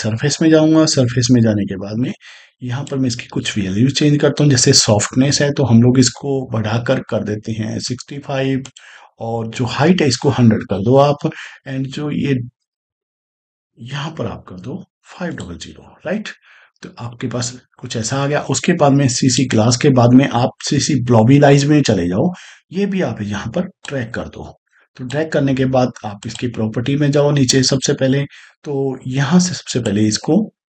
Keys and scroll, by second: 7.1 6, 7.7 5, 13.9 5, 14.5 0, 14.6 0.